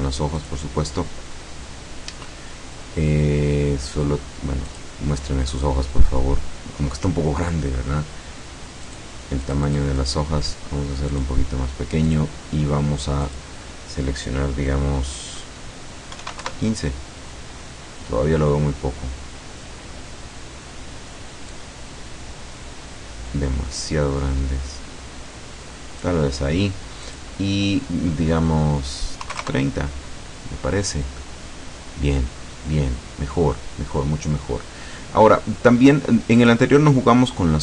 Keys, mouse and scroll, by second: 0.5 click, 4.8 click, 8.9 click, 9.5 click, 11.2 click, 12.1 click, 13.3 click, 16.2 KP_1, 16.5 KP_Enter, 21.6-26.3 drag, 27.1 click, 29.3 KP_3, 29.4 KP_0, 29.7 KP_Enter, 31.3-33.8 drag, 33.9-34.5 scroll up 4, 34.5-34.9 scroll down 2, 35.8-36.4 scroll up 1, 36.4 click, 36.7-37.6 scroll up 1.